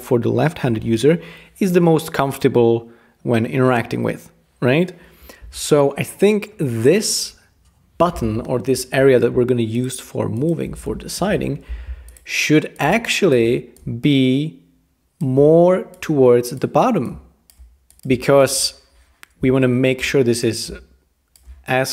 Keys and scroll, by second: 11.2 super+g.